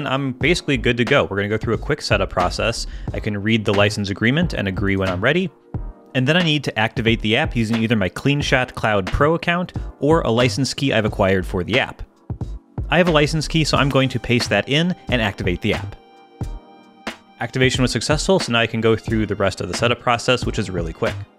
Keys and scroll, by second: 14.1 super+v.